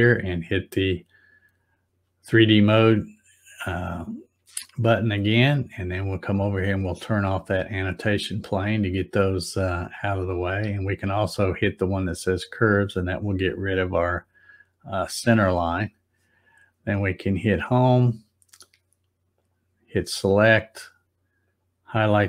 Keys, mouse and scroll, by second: 0.9 click, 6.8 click, 12.3 click, 17.1 click, 19.3 click, 21.4 click.